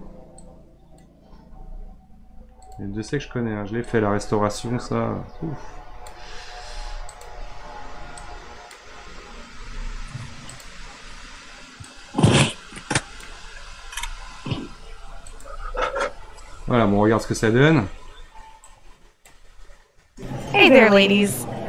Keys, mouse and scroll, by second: 0.4-1.5 drag, 1.5 r, 3.9-6.5 drag, 6.5 r, 8.2-9.5 drag, 9.5 r, 11.9-13.9 drag, 13.9-15.4 r, 18.8-20.0 drag, 20.0 space.